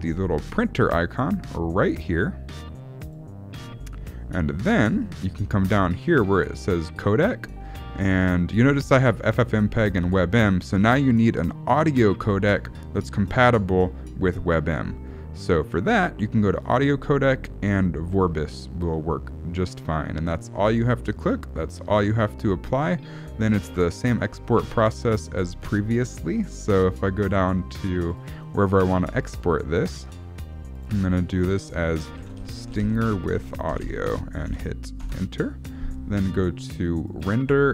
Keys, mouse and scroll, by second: 3.0 click, 5.8 middle click, 16.6 click, 19.5 middle click, 23.7 click, 37.0 click.